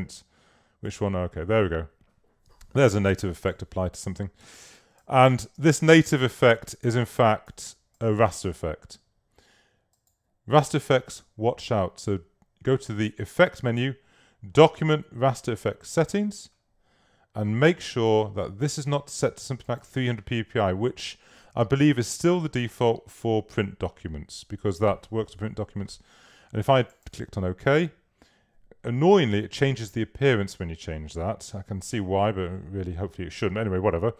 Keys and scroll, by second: 4.7 space.